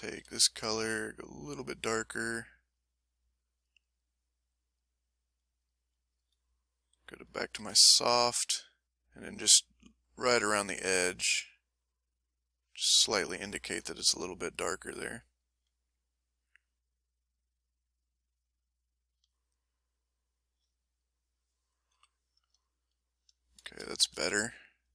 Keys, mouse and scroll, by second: 0.1 s, 1.1 click, 2.5 click, 3.5 click, 4.7 click, 5.2 click, 5.6 click, 6.1 click, 6.5 click, 7.3 click, 7.8 ctrl+click, 9.0-13.4 ctrl+drag, 14.3-15.7 drag, 16.1-18.2 drag, 18.2 click, 18.7 click, 19.8-21.1 drag, 21.9 m, 22.0 middle click, 22.7 ctrl+middle click, 23.4 ctrl+middle click, 23.9-24.9 ctrl+shift+middle drag.